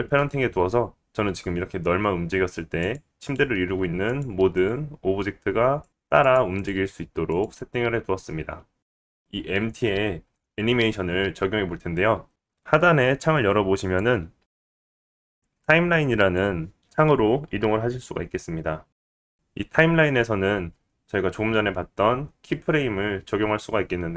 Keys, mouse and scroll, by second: 1.9 click, 1.9 right click, 2.3 g, 3.2 click, 3.2 right click, 4.5 click, 4.7 g, 5.7 click, 5.9 g, 11.6 click, 13.5-14.5 drag, 14.9-21.1 drag, 21.4 click.